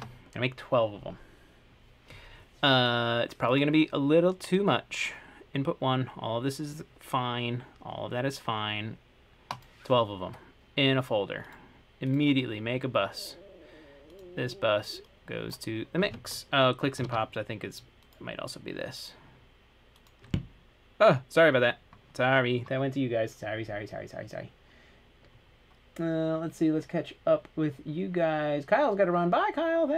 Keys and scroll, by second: 0.0-0.6 typing, 17.3 super+,.